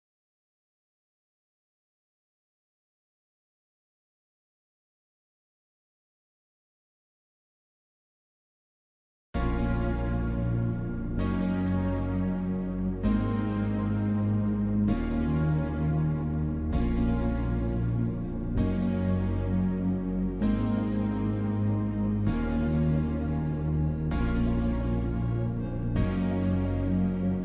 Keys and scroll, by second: 7.6 ctrl+j, 7.9 ctrl+t, 21.2 ctrl+t.